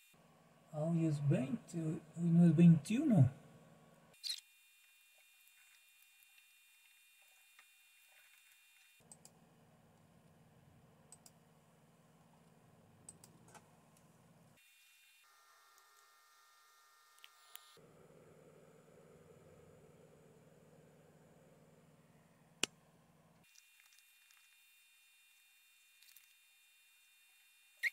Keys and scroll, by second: 5.5 typing, 5.7 Return, 7.9 Escape, 8.1-8.9 typing.